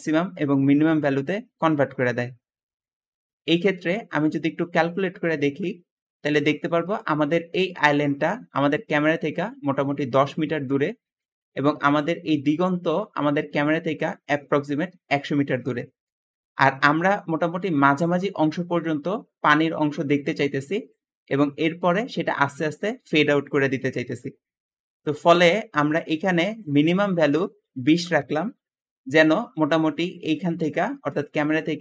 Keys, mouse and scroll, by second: 2.7 Escape, 2.8 Escape, 16.6 `, 18.6 ', 25.6 Escape, 27.6-28.1 typing, 28.0 Return, 28.1 Return, 29.7-31.2 typing.